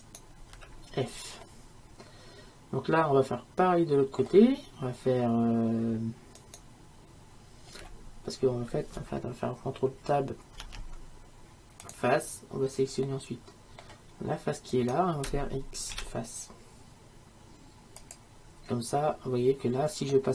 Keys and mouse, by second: 0.6 f, 1.7 middle click, 6.4-8.3 right drag, 10.7 ctrl+Tab, 13.4 click, 14.8-18.1 right drag, 16.0 x, 18.8-20.3 middle drag.